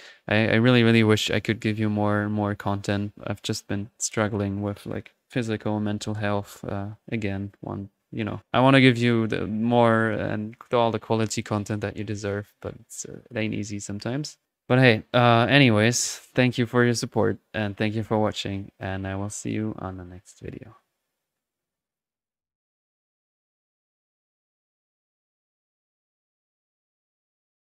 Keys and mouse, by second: 8.4-8.9 drag, 15.8-16.9 middle drag.